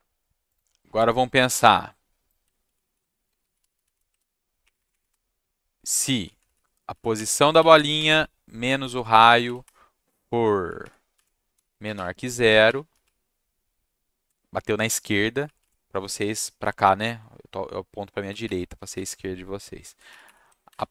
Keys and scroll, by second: 2.6 ctrl+c, 2.8 ctrl+v, 3.1-4.3 typing, 4.6 Up, 4.7 Up, 4.9 Up, 5.1 Right, 6.3 Right, 6.5 Right, 6.9 Right, 7.1 Left, 7.9 -, 8.0 Right, 9.2 Left, 9.3 Left, 9.6 shift+Right, 10.8 shift+Right, 11.1 shift+Left, 11.5 shift+,, 11.8 space, 11.9 0, 12.9 Down, 13.0 Left, 15.4 Left, 15.6 Left, 18.1 Down, 18.4 Right, 18.9 shift+Right, 20.1 shift+Right, 20.2 shift+Right.